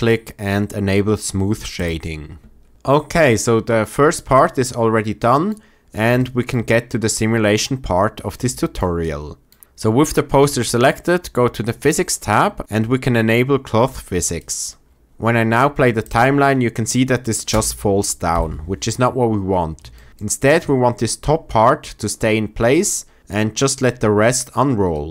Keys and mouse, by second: 2.8 drag, 11.7 click, 14.3 click, 15.0 shift+Left, 15.0 space, 17.4 space, 18.2 shift+Left, 19.9 shift+click, 20.1 click.